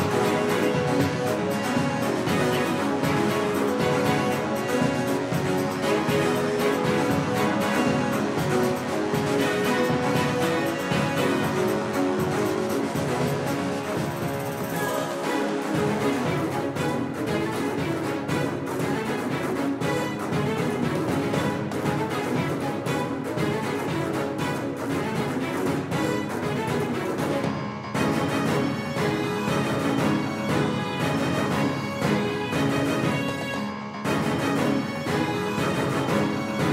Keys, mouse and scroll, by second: 2.3 shift+d, 11.8 g, 14.3 g, 18.8 s, 24.5-26.7 drag, 27.7-28.7 middle drag, 33.3 r, 36.1 r.